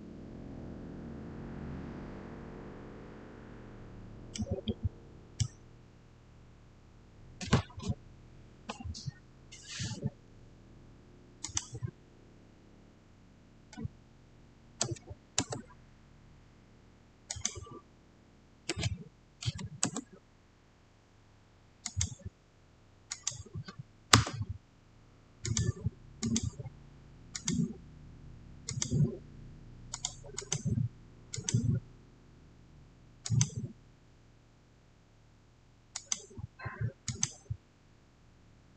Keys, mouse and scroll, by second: 4.2 click, 4.2-7.6 middle drag, 11.3 middle click, 11.3 click, 14.7 click, 14.8 5, 15.2 Return, 17.2 click, 18.5-19.3 typing, 19.7 Return, 21.7 click, 24.0 Return, 25.4 click, 35.8 click.